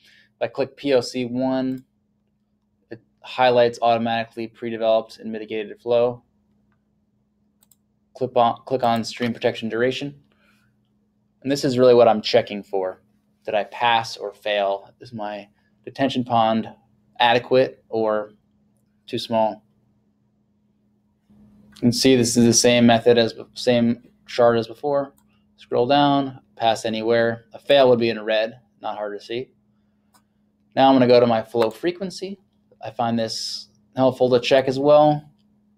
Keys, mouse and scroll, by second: 1.7 click, 7.7 click, 8.9 click, 25.2 click, 31.7 click.